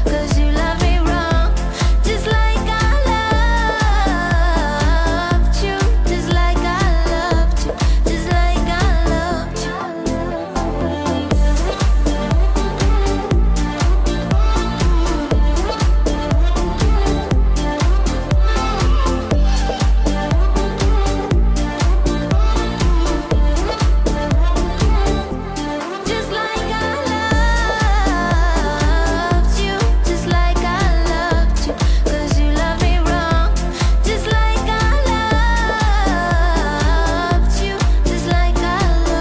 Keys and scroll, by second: 8.0 ctrl+=, 8.9 ctrl+-, 12.8 ctrl+-, 14.7 ctrl+=, 16.0 ctrl+=, 21.5 ctrl+-.